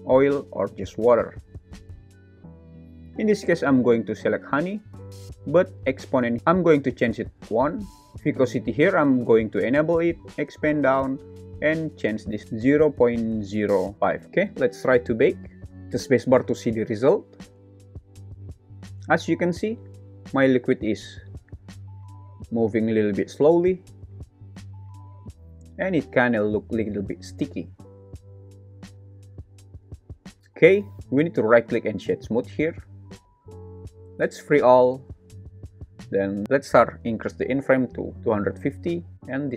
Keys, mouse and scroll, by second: 5.8-7.5 drag, 8.9 click, 10.2 click, 11.3-14.2 drag, 14.2 super+s, 15.7-19.2 drag, 16.6 space, 23.7 shift+z, 24.6 shift+z, 29.8 space, 31.7 right click, 35.7-36.0 drag, 36.4 click, 39.2 click.